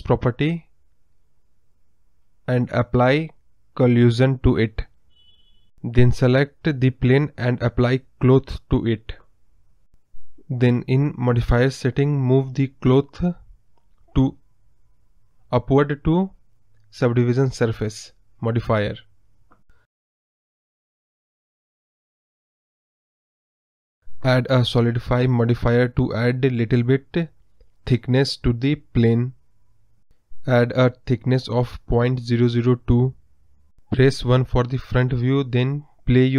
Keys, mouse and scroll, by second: 0.0 click, 0.3 scroll up 4, 0.5-5.0 middle drag, 5.0-7.0 drag, 7.0 middle click, 7.6 click, 9.4-12.1 drag, 12.1 scroll down 2, 12.4-18.0 middle drag, 18.0-19.3 drag, 19.4 scroll down 1, 19.4 middle click, 19.6 scroll up 3, 19.8 middle click, 20.2 scroll down 1, 20.4-22.5 middle drag, 22.5 scroll down 1, 22.6-24.5 middle drag, 24.5 click, 26.3 click, 26.7 scroll up 4, 26.9 middle click, 27.7 KP_Decimal, 28.0 scroll up 1, 28.1 middle click, 29.0 scroll up 2, 33.6 scroll down 2, 33.7 middle click, 34.3-35.3 scroll down 5, 35.3 KP_1, 35.8 scroll up 1, 35.9 middle click.